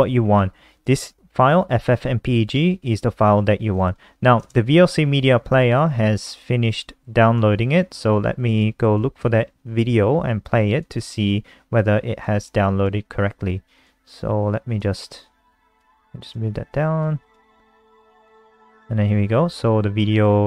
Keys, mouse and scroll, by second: 0.9 click, 8.6 super+d, 11.0 click, 11.2 click, 12.4 click, 16.1 click.